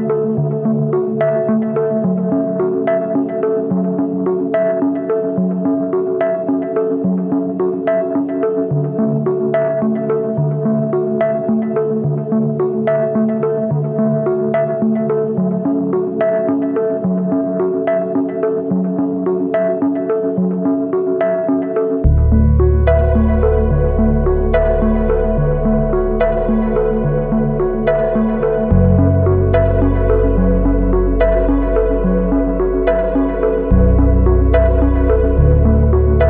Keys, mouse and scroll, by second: 2.6 alt+click, 3.2 scroll down 1, 3.5 alt+middle click, 4.2-7.9 drag, 8.2-8.6 scroll up 3, 8.4 alt+middle click, 8.8 alt+middle click, 9.3 scroll down 1, 9.5 alt+middle click, 9.8 scroll up 2, 10.2 alt+middle click, 17.2-18.2 drag, 18.5-18.9 alt+scroll down 3, 19.7 click, 20.6 click, 21.9-26.4 drag, 29.6 scroll down 2, 30.7-36.2 drag.